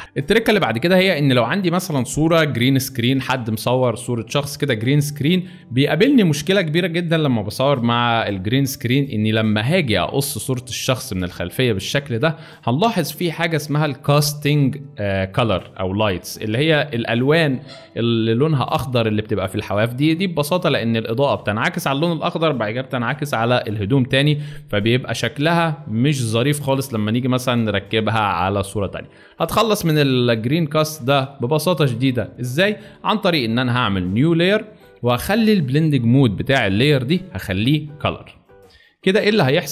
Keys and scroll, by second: 3.4 space, 7.4 alt+space, 8.2 alt+space, 9.4 space, 12.4 space, 15.6 alt+shift+space, 20.3 shift+space, 26.9 alt+shift+space, 27.7 alt+shift+space, 28.8 alt+shift+space, 30.6 space, 31.3 alt+space.